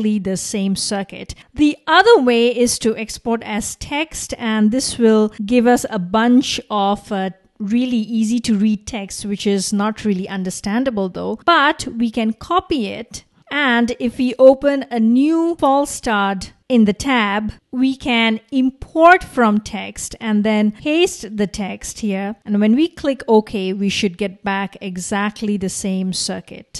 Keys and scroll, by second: 12.6 super+c, 15.3-16.7 typing, 16.5 Return.